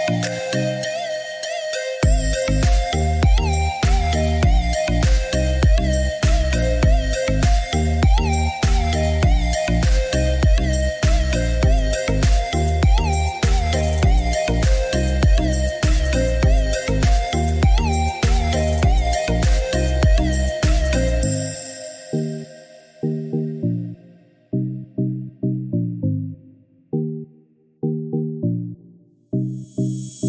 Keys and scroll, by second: 9.1 2, 9.4 Return.